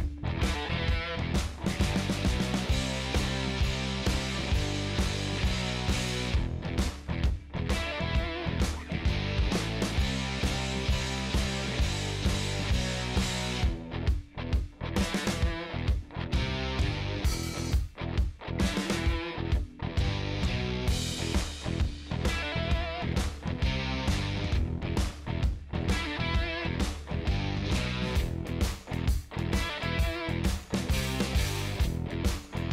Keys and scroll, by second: 0.0-0.5 typing, 8.2-9.3 typing, 9.6 Down, 13.4 Return, 29.2 8, 29.8 Right, 30.4 BackSpace, 31.0 8.